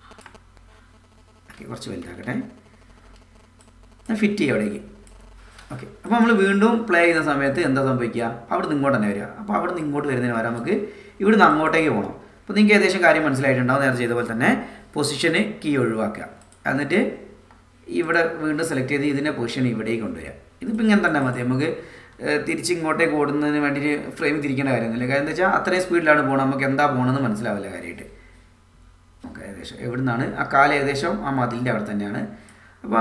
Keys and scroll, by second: 2.0 =, 7.9 space.